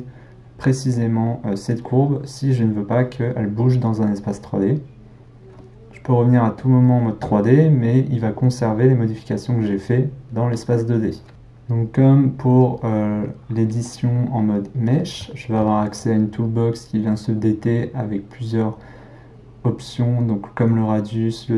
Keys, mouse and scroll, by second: 6.6 click, 11.3 click, 14.4-18.3 middle drag.